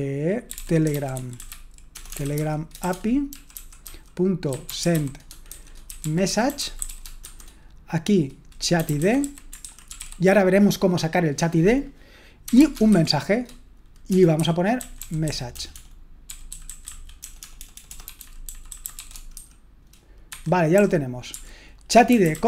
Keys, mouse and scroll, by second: 0.6-10.5 typing, 14.1-22.4 typing, 20.3 Escape.